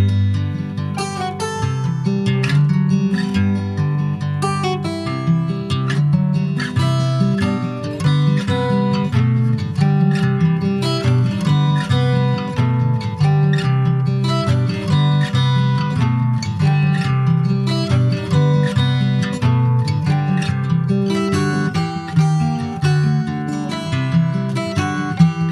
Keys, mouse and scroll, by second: 0.3 3, 0.5 click, 1.2-2.6 middle drag, 2.6 e, 4.6 middle click, 5.5 2, 5.9 click, 6.5 shift+click, 7.3 ctrl+click, 7.5 ctrl+b, 10.9 Tab, 11.1 click, 11.3 scroll down 3, 11.5 middle click, 12.1 ctrl+s, 12.3 click, 12.8 /, 13.4 click, 14.0 middle click, 14.7 ctrl+s, 15.0 middle click, 15.7 ctrl+s, 15.9 scroll down 2, 16.1 middle click, 17.0 ctrl+s, 17.1 click, 17.4 scroll up 1, 17.7 middle click, 18.1 scroll up 1, 18.3 ctrl+s, 18.5 click, 19.2 /, 19.6 middle click, 20.1 Tab, 20.3 click, 20.8 shift+middle click, 21.0-21.4 shift+scroll up 1, 21.4 3, 21.5 click, 22.0 middle click, 22.7 click, 23.9 middle click, 24.4 ctrl+b.